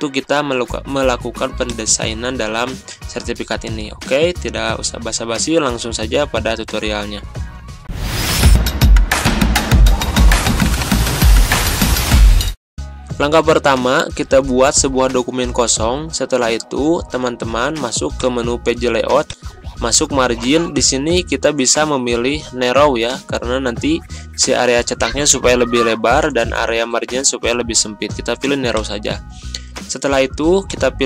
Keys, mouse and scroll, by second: 1.6 click, 7.8 ctrl+End, 12.8-13.8 ctrl+scroll up 1, 28.9 click.